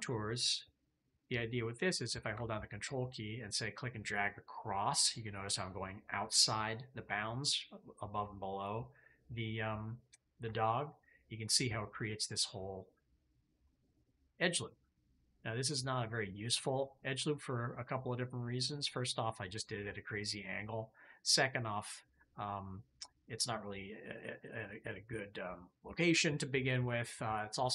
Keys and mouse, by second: 2.8-6.5 ctrl+drag, 11.5-19.3 drag, 22.0-23.3 drag.